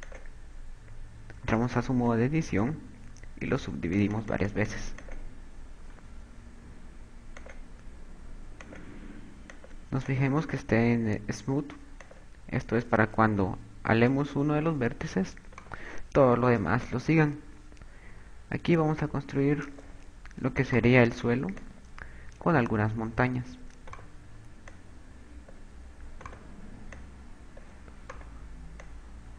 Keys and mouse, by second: 0.9 click, 2.6 Tab, 3.6 click, 4.4 click, 5.6 click, 8.2 click, 10.4 click, 11.0 click, 13.6 KP_6, 15.0 a, 16.0 right click, 17.5 click, 21.4 right click, 22.5 click, 23.8 right click, 25.6 click, 27.0 right click, 27.9 click, 28.9 right click.